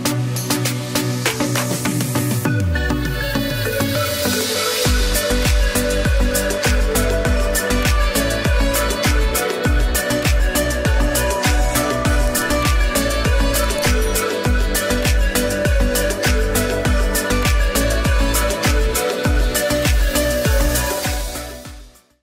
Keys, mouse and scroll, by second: 1.2 o, 2.0 ], 2.2 click, 5.2 ], 5.8 ], 5.9 click, 6.4 ], 7.0 z, 7.3 click, 8.9 space, 9.0 click, 17.3 F12.